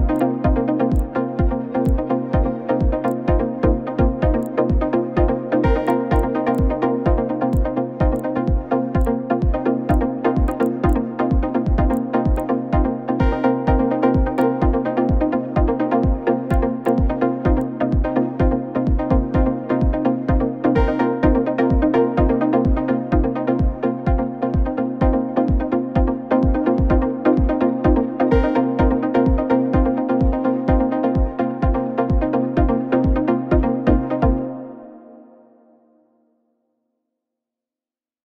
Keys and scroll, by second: 11.3 ctrl++, 11.4 ctrl++, 11.5 ctrl++.